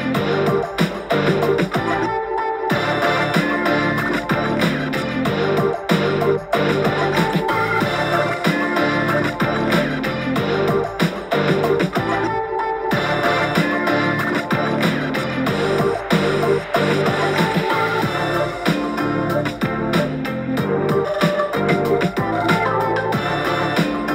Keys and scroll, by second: 3.5 super+z, 4.0 x, 8.0 super+t, 11.6 v.